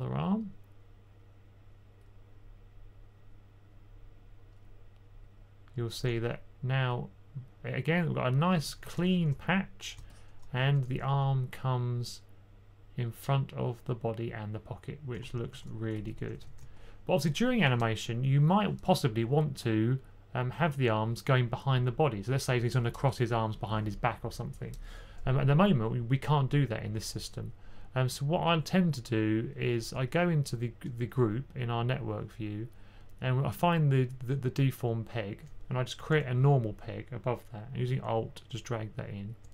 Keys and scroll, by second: 8.6 typing, 10.8-11.2 typing, 15.4 super+z, 16.0 1, 16.2 1, 16.3 1, 36.0 super+p.